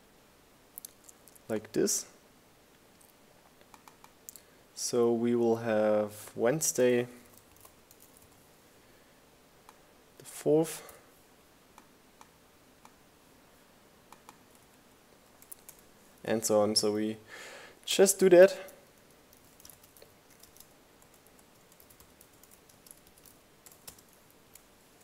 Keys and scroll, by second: 4.2-5.6 typing, 8.1 4, 12.0 Right, 12.8 Return, 15.0-21.9 typing, 18.4 Return, 22.4 Return, 23.1-25.0 typing.